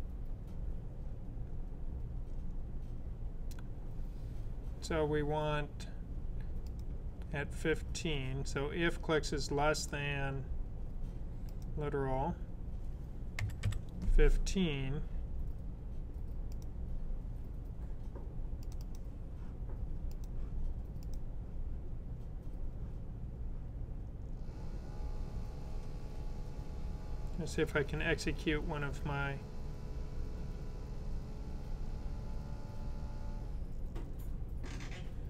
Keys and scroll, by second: 13.0-14.0 typing.